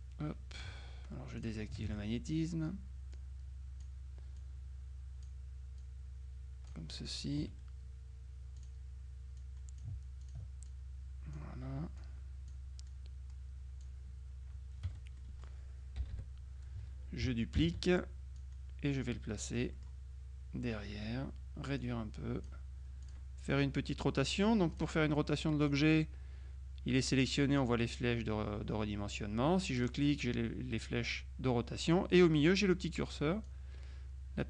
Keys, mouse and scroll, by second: 1.4 click, 1.9 ctrl+z, 3.2-4.4 drag, 4.5-5.8 drag, 7.0 click, 7.0 right click, 7.5 F2, 8.6 click, 9.5 click, 10.8 ctrl+click, 12.0 click, 14.9 F1, 15.2 click, 16.0 KP_Subtract, 17.6 ctrl+d, 18.5-20.4 drag, 21.9-23.0 drag, 23.1 click, 24.8 click, 25.7 click, 29.8 click, 33.5-34.4 drag.